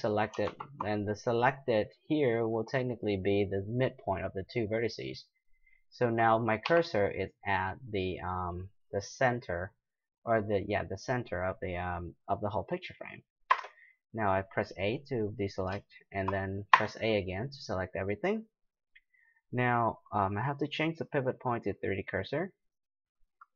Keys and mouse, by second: 0.4 shift+s, 6.6 KP_7, 7.4 middle click, 13.5 a, 15.9-19.8 middle drag, 17.7 a, 20.7-22.6 drag.